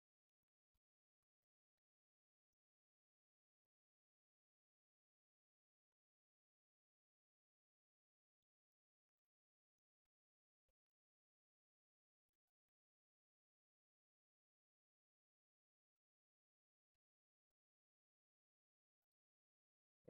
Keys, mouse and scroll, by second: 0.3 click, 0.8 click, 1.7 alt+middle click, 2.4 alt+middle click, 4.0 click, 5.1 click, 5.9 click, 7.4 click, 9.0 click, 9.6 click, 10.8 click, 11.8 click, 12.6 click, 13.9 click, 14.3 click, 17.8 click, 18.9 click, 19.6 click.